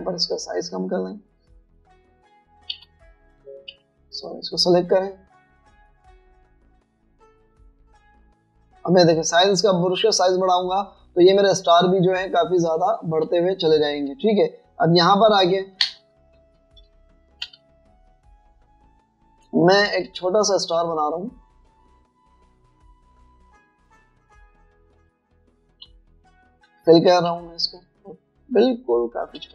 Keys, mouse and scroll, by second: 1.6 scroll down 1, 2.7 scroll up 1, 3.4 scroll up 1, 3.8-4.8 typing, 7.5 scroll up 1, 7.7 typing, 8.2 scroll down 1, 8.9 scroll up 1, 9.5 scroll up 1, 9.9 scroll down 1, 10.5 scroll down 1, 10.6-12.9 typing, 10.9 scroll up 1, 11.1 scroll, 11.5 scroll down 1, 11.8 scroll, 12.1 scroll down 1, 14.3 typing, 15.5 double click, 16.8 Delete, 17.7 alt+scroll down 1, 17.9 space, 18.7 alt+scroll up 2, 20.5 space, 22.9 double click, 26.7-28.3 typing, 29.4 alt+shift+click.